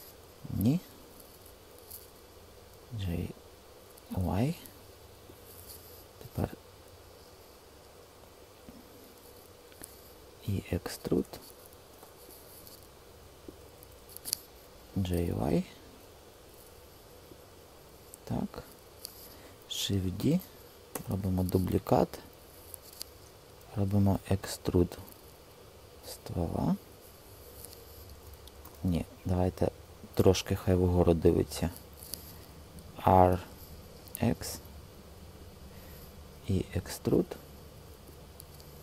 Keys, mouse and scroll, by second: 0.3 super+z, 2.6 g, 4.1 y, 10.2 e, 11.8 Return, 14.8 g, 15.4 y, 20.1 shift+d, 20.9 Return, 23.5 e, 25.6 click, 28.5 typing, 28.9 super+z, 32.8 r, 33.9 x, 36.2 e.